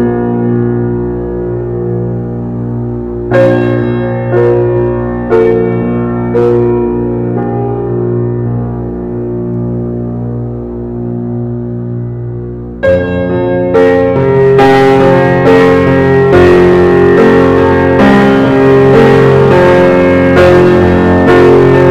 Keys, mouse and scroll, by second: 0.1 alt+z, 0.4 alt+middle click, 0.9 click, 2.9 shift+click, 3.5 shift+click, 4.1-5.0 middle drag, 5.0 ctrl+drag, 5.7 ctrl+click, 7.1 ctrl+z, 7.6 ctrl+a, 9.7 ctrl+j, 10.7-11.5 middle drag, 11.5 Tab, 12.0 Tab, 12.2 click, 12.5-13.0 scroll down 3, 13.0 alt+z, 13.3 click, 14.4 g, 15.5 alt+middle click, 16.0 alt+middle click, 16.7 alt+z, 17.0 click, 18.9 ctrl+j, 19.9-20.7 middle drag, 20.7 alt+z, 21.1 click, 21.6-21.9 scroll down 2.